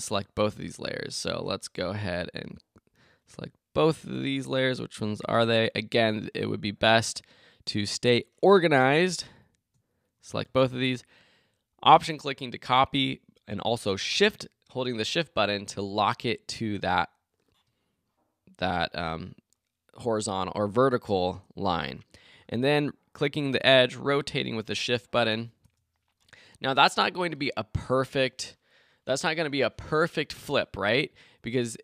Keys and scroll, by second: 25.6 shift+Return.